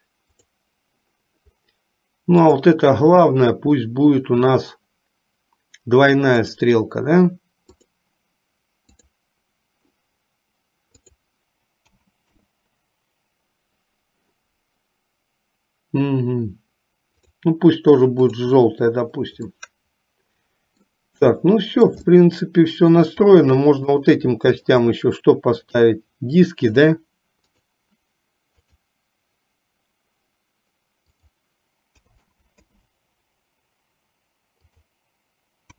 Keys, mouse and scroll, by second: 2.5 click, 6.4-8.1 drag, 9.1 click, 11.0-12.6 drag, 18.4 click, 19.6-21.0 middle drag, 21.5 shift+middle click, 22.2 middle click, 24.0 click, 24.8 shift+click, 25.8-27.8 drag, 28.7 click, 31.1-33.0 drag, 34.6-35.7 drag.